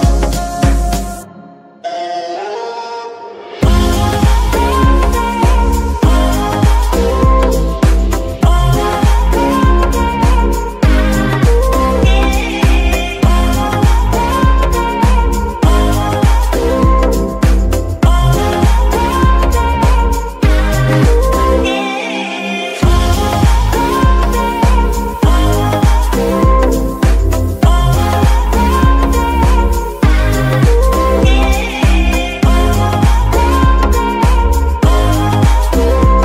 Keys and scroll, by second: 4.9-5.6 typing, 8.1 KP_Decimal, 11.0 r, 11.3 z, 11.5 z, 14.7 ctrl+c, 18.0 ctrl+v, 19.3 ctrl+shift+v, 25.3 KP_3, 25.9 r, 33.9 r, 35.1 Escape.